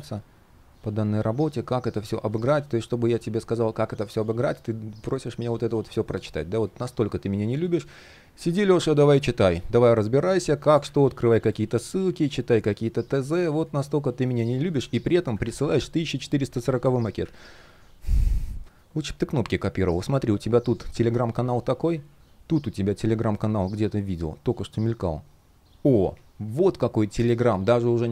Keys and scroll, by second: 15.0 super+\, 16.4 super+\, 18.4 shift+3, 20.7 super+z, 28.0 super+z.